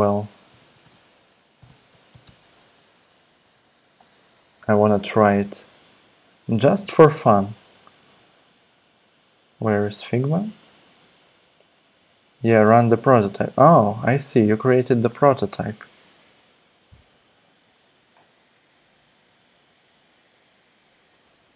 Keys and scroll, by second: 0.2-2.8 typing, 3.9 Return, 5.3 super+Tab, 6.2 super+Tab, 8.1 super+Tab.